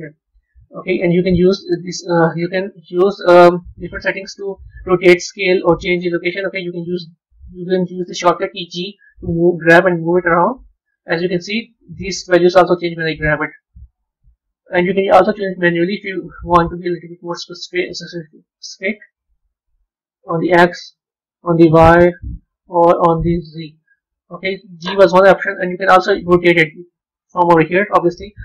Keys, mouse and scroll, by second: 3.4-6.4 middle drag, 8.6 g, 13.1 g, 16.4-19.1 drag, 19.1 ctrl+z, 20.6 click, 22.0 ctrl+z, 22.8-24.0 drag, 24.0 ctrl+z.